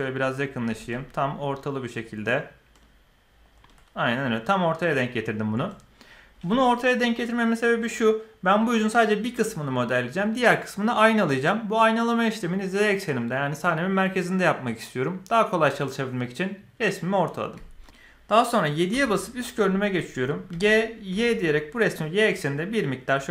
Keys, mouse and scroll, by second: 0.6 g, 17.7 KP_1, 18.9 KP_7, 20.5 g.